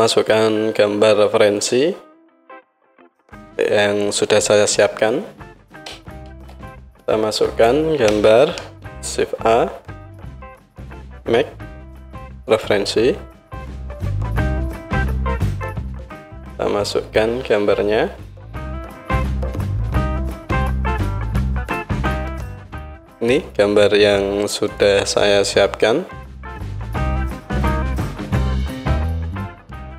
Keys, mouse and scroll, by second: 8.6 shift+a, 19.8-24.9 drag, 26.3 click, 26.8 click, 28.6 click.